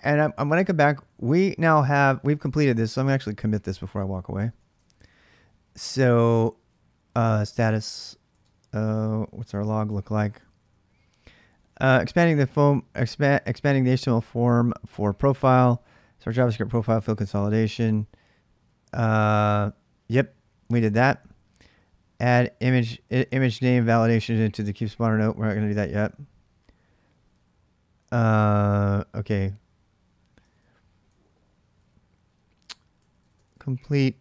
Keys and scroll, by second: 0.3-1.3 typing, 2.9 ctrl+[, 2.9-12.0 typing, 5.8 ctrl+[, 9.4 ctrl+a, 10.2 ctrl+[, 15.3 j, 17.9 j, 18.4 k, 18.6 k, 20.8 j, 21.0-21.8 j, 22.3 k, 22.5 k, 26.9 k, 27.4 k, 27.8-28.4 h, 29.9-34.2 typing.